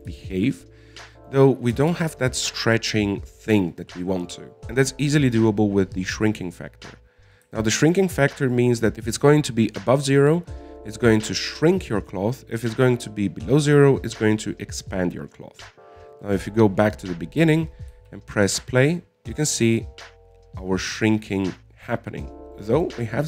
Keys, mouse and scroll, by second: 0.6-1.3 scroll down 9, 1.3-2.5 middle drag, 2.5 scroll up 1, 2.6 middle click, 3.3 alt+a, 8.7 click, 17.5-19.3 drag, 19.3 alt+a, 20.5-23.2 middle drag.